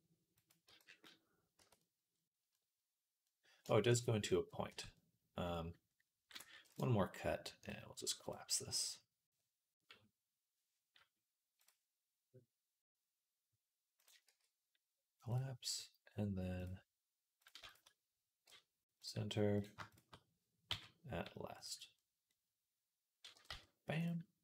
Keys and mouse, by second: 0.5 z, 0.8 middle click, 1.4 Tab, 1.6-11.4 middle drag, 6.3 ctrl+r, 7.4 click, 11.4-13.9 drag, 13.9-16.5 middle drag, 14.1 x, 16.5 click, 17.3-24.3 shift+middle drag, 18.3 m, 20.5 m, 23.2 g, 24.3 click.